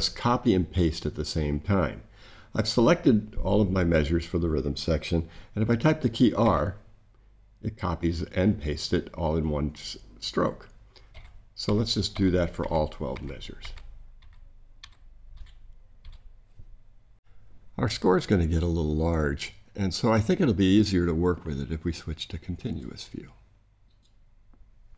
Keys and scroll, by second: 6.4 r, 11.1 r, 11.6 r, 15.3 r.